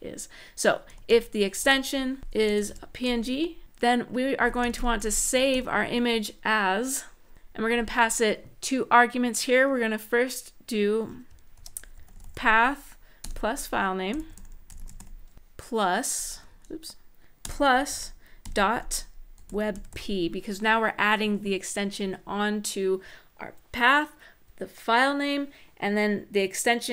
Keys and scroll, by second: 0.4-2.7 typing, 3.9-7.3 typing, 11.1-12.5 typing, 13.6-16.1 typing, 17.7-20.2 typing.